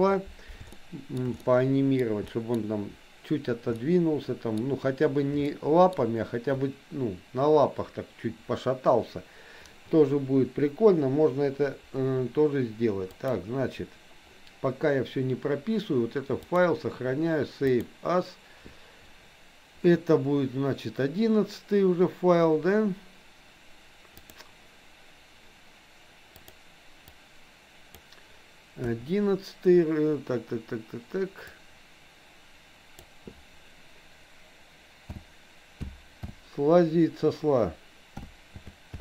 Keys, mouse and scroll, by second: 0.8 shift+middle click, 1.4 middle click, 2.3 middle click, 3.8 middle click, 5.5 shift+middle click, 13.1 click, 16.5-20.5 drag.